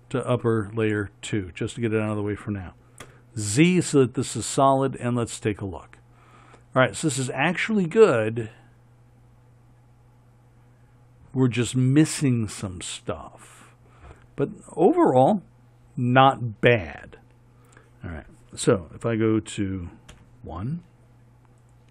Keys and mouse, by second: 2.1-5.3 right drag, 20.4 KP_1.